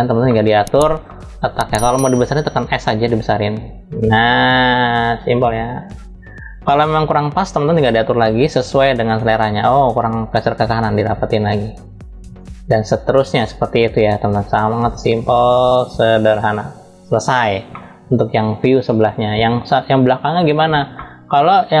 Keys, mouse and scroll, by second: 0.7 scroll down 1, 2.3 scroll down 1, 2.3 s, 7.9 click, 13.9-16.8 drag, 17.4 middle click, 20.6-21.8 middle drag.